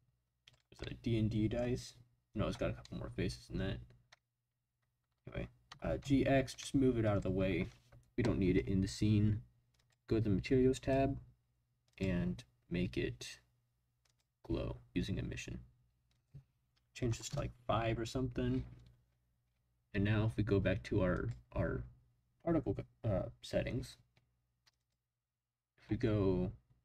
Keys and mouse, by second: 0.8-1.6 middle drag, 2.9 middle click, 5.7 g, 6.0 x, 7.0 click, 9.7 click, 10.8 click, 11.9-14.2 drag, 16.1-17.9 drag, 21.1 click.